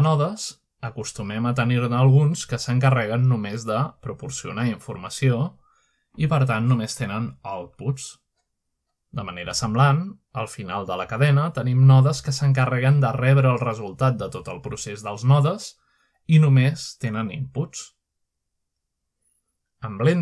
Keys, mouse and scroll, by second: 0.7 middle click, 1.4 click, 5.6 click, 6.5 middle click, 6.7-8.0 scroll up 1, 7.3 middle click, 8.1-9.6 drag, 8.4 scroll up 1, 9.9-10.2 middle drag, 10.0-10.8 scroll up 1, 11.4-12.5 scroll down 2, 12.2 middle click, 12.5-13.2 middle drag, 12.7-15.5 scroll up 5, 13.8 middle drag, 15.1-15.7 middle drag, 15.5-16.5 drag, 18.7-20.0 scroll down 2, 20.0 middle click.